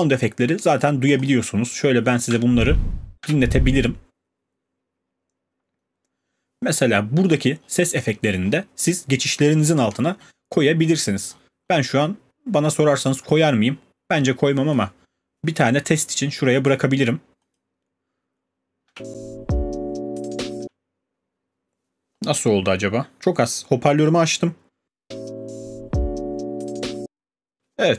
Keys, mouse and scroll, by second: 1.1 click, 1.3 click, 2.3 space, 3.2 space, 5.8-7.0 scroll down 13, 7.2-8.5 scroll, 9.4-10.3 scroll, 10.8-13.3 scroll, 13.3 click, 13.5 click, 16.7 click, 17.6 click, 18.8 space, 20.6 space, 23.2 click, 24.8 space, 26.9 space.